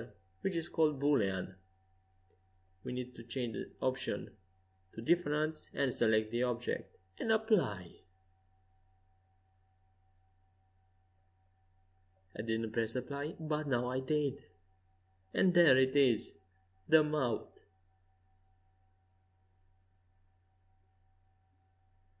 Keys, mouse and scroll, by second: 12.4 click, 14.9 click, 16.3-18.1 middle drag, 20.5 ctrl+z, 21.3-22.2 middle drag.